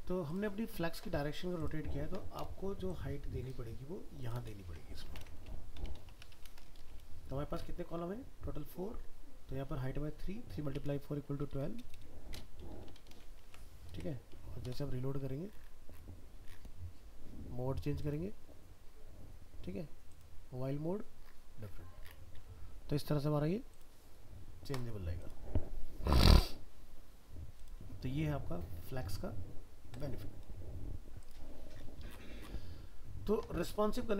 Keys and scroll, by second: 13.4 ctrl+s, 13.9 alt+Tab.